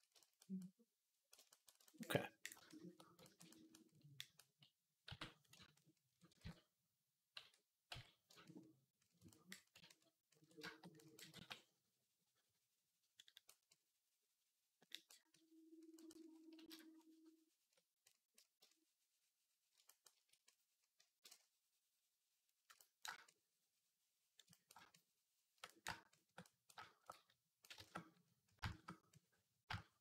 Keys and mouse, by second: 0.0-4.9 shift+middle drag, 0.0-4.9 shift+right drag, 4.9 d, 6.3 ctrl+z, 7.2 d, 7.7 x, 11.1 v, 19.5-30.0 shift+drag, 19.5-30.0 shift+middle drag, 19.5-30.0 shift+right drag.